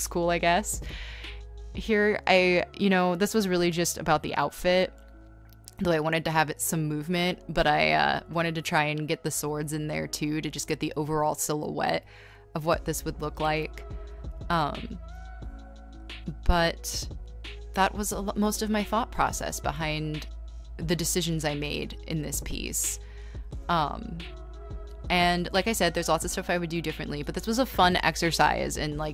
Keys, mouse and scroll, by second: 5.8-8.1 typing, 10.3 space, 11.8 ctrl+z, 12.1 ctrl+z, 12.4 e, 14.7 ctrl+z, 23.4 space, 28.2 b, 28.7 scroll.